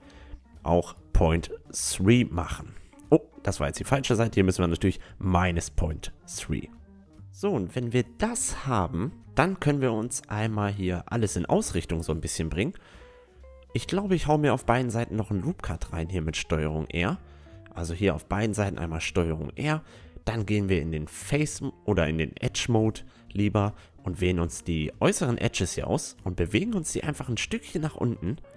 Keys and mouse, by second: 1.4 g, 3.9 g, 6.6 Tab, 6.8-10.5 middle drag, 8.4 Tab, 10.5-13.0 right drag, 13.2-14.8 drag, 14.7 ctrl+r, 18.2 ctrl+r, 20.4-23.9 drag, 21.0-26.4 right drag, 25.9-27.6 drag.